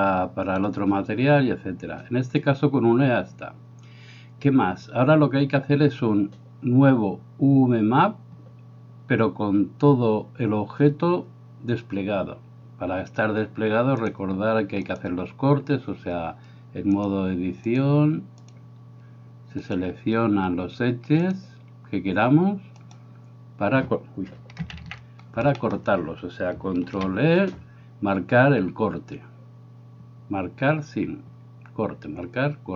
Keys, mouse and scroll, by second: 14.0-15.0 drag, 17.0 click, 17.7 click, 19.7-21.3 right drag, 21.3-22.8 drag, 22.8-24.6 right drag, 24.8 ctrl+z, 25.6 shift+middle click, 26.9 ctrl+e.